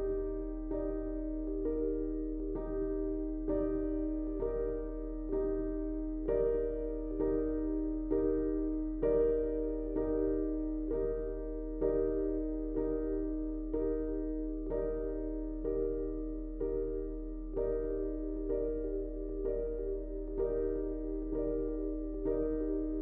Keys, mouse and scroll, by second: 1.5 typing, 2.0-3.4 shift+drag, 3.5-4.4 typing, 3.6 click, 4.3 click, 4.7-7.4 drag, 7.4 space, 7.5 click, 8.6-9.8 typing, 8.8 click, 9.7 click.